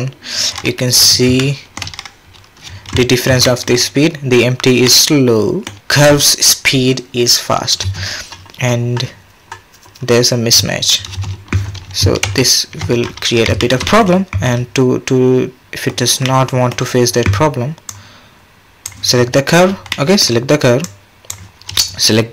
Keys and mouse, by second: 1.4-1.7 shift+drag, 2.6 space, 2.9 drag, 3.1 middle drag, 3.4 shift+middle drag, 4.9 click, 5.0 middle click, 7.8 space, 11.1 space, 12.3 ctrl+z, 13.6 shift+click, 13.9 click, 15.6 click, 16.3-16.7 drag, 17.9-18.9 drag, 19.9 drag, 20.8-21.3 drag.